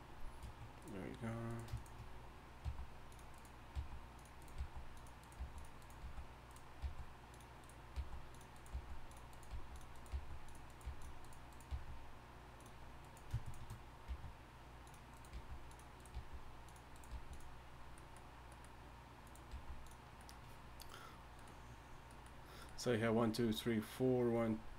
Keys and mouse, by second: 1.0-4.9 drag, 2.6 g, 3.7 g, 4.6 g, 5.4 g, 5.9 right click, 6.8 g, 7.9-11.7 typing, 14.1 g, 15.3 g, 16.1 g, 17.1 g, 19.5 g.